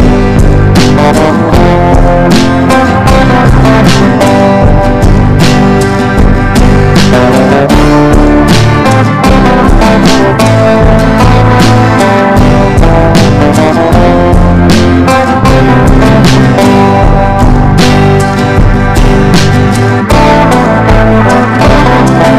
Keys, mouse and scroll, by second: 2.8 click.